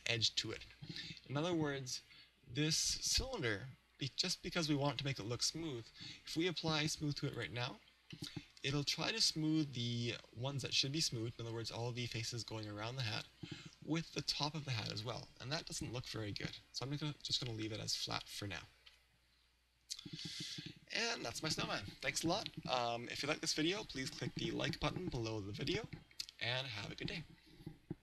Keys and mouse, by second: 1.7 middle click, 7.4 click, 8.2-9.9 middle drag, 17.3 click, 18.9 KP_1, 20.2-28.0 middle drag.